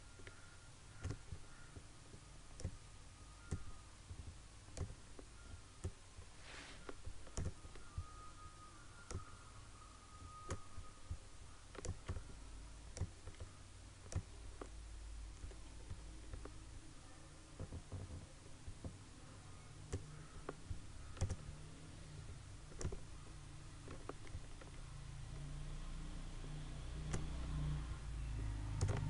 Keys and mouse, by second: 7.5 typing.